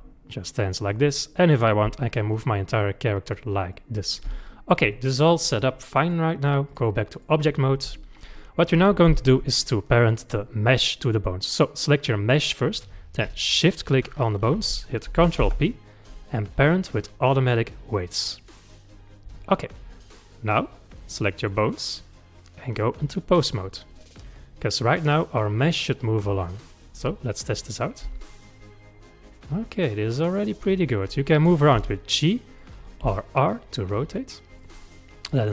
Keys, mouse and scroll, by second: 1.5 click, 1.8 g, 3.7-6.0 middle drag, 6.0-7.2 drag, 10.2 click, 13.6 shift+click, 15.4 ctrl+p, 20.9 click, 21.4 click, 22.4-23.8 drag, 23.8-26.8 middle drag, 27.6 click, 28.0 g, 31.7 g, 32.6-33.0 middle drag, 33.0 r, 34.8-35.5 middle drag.